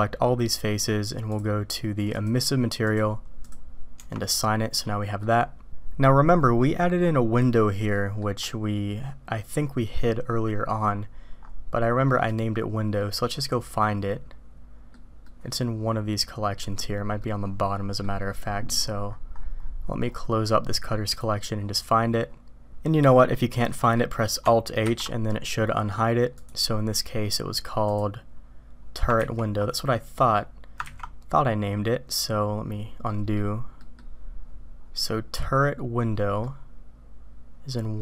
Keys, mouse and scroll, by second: 1.3 click, 2.1 click, 3.4 click, 4.0 Tab, 4.8-5.2 drag, 4.8-5.2 middle drag, 5.7 middle click, 7.9 middle click, 12.2 click, 13.1-14.9 drag, 15.2-16.8 drag, 17.3 click, 21.1 click, 23.1 middle click, 23.7 middle click, 24.9 alt+h, 27.9 click, 30.2 ctrl+z, 30.2 click, 33.3 ctrl+z, 33.3 click, 33.8 click, 36.5-38.0 drag.